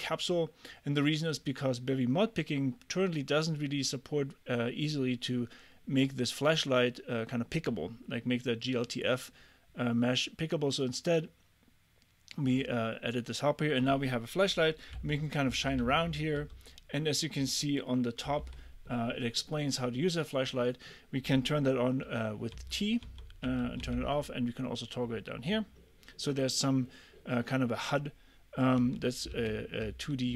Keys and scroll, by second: 15.0 l, 15.5 j, 15.8 k, 16.4 i, 18.4 t, 22.6 t, 23.5 t, 28.8-30.3 typing.